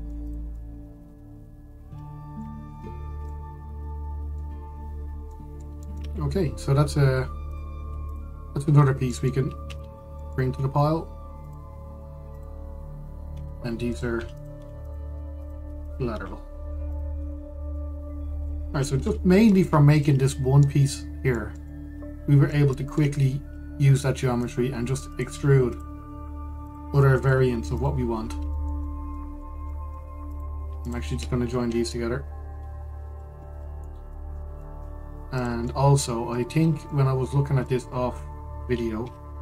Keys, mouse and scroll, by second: 0.1 scroll up 1, 0.4-0.9 middle drag, 0.9 click, 1.2-3.3 middle drag, 3.3-3.9 scroll down 2, 3.9-5.3 middle drag, 5.3-6.0 scroll down 2, 6.0-6.8 middle drag, 6.8-8.2 scroll up 2, 8.2 click, 8.7 shift+click, 9.4-9.8 scroll down 2, 9.8 middle click, 10.5 shift+d, 13.0 click, 14.0 Delete, 14.6 click, 14.8 Delete, 15.0 click, 15.2 Delete, 15.5 click, 15.7 Delete, 16.1 click, 16.3 Delete, 16.5 click, 16.8 Delete, 17.6 click, 17.8 Delete, 18.4-19.3 middle drag, 19.3-19.8 scroll up 2, 19.8-20.6 shift+middle drag, 20.6 click, 20.9-21.5 middle drag, 21.5-22.0 scroll up 2, 22.0-25.1 shift+middle drag, 25.1 click, 25.8 click, 26.4 click, 27.3 drag, 27.8 click, 28.4 drag, 28.9-29.2 scroll, 29.2-30.0 shift+middle drag, 30.0-30.4 scroll up 1, 30.4-31.0 shift+middle drag, 31.0 click, 31.5 shift+click, 33.3 ctrl+j, 34.5 scroll down 1, 34.8-36.0 middle drag, 36.0 drag, 36.3-37.3 middle drag, 37.3 scroll down 1, 37.6-39.1 shift+middle drag, 39.1-39.4 scroll up 1.